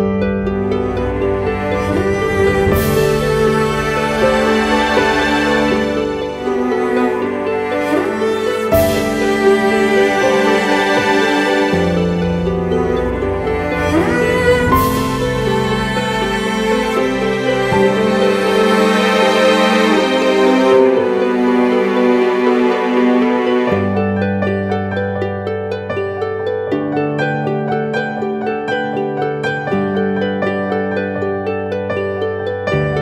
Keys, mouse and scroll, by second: 0.6-1.4 [, 1.6 [, 1.8 [, 1.9 [, 9.1-11.0 typing, 17.7 double click.